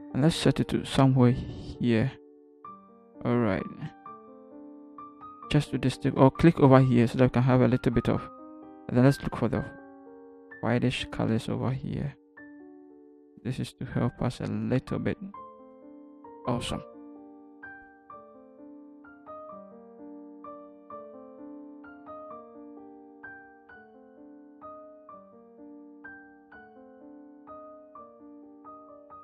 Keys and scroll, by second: 22.8 Return, 23.7 ctrl+t, 24.4 Up, 24.7 Return.